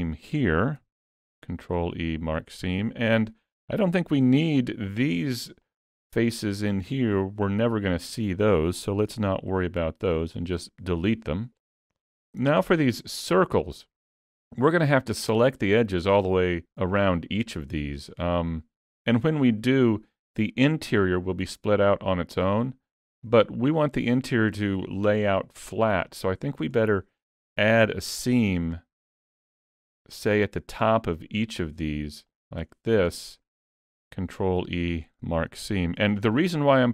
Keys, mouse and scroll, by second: 0.1 shift+middle click, 1.2 ctrl+e, 2.8 alt+a, 3.2 shift+middle click, 4.6 3, 5.2 click, 5.7 shift+click, 6.1 click, 7.1 middle click, 9.1 x, 11.5 middle click, 12.5-14.0 shift+scroll up 3, 12.9 shift+middle click, 13.4 middle click, 14.2 middle click, 19.3 middle click, 21.1 middle click, 26.1 middle click, 26.8 shift+middle click, 27.5 2, 28.3 click, 29.3 shift+click, 29.9 shift+middle click, 30.4 middle click, 31.5 shift+click, 32.3 shift+click, 32.9 scroll down 1, 33.2 middle click, 34.0 ctrl+e, 36.0 alt+a, 36.4 middle click.